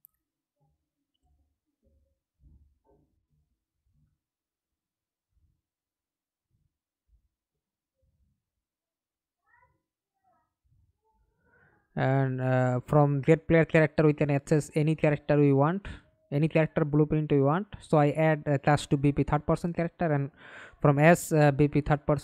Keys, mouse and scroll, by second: 0.0-0.8 typing, 1.9 middle click, 2.9 alt+F9, 5.7-8.0 typing, 10.6-11.4 typing, 11.6 Return, 15.2 right click, 16.9 right click, 19.3-20.8 typing, 20.8 Return.